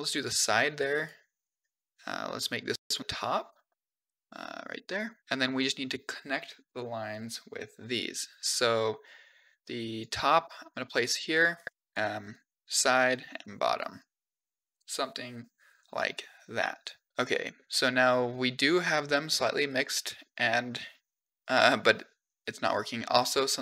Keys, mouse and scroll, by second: 0.8 click, 2.3 drag, 6.7-10.1 drag, 11.4 click, 11.8 click, 12.2 click, 13.8-15.9 drag, 17.1 scroll down 2, 17.2 middle click, 17.9-20.1 middle drag, 21.3-22.4 middle drag.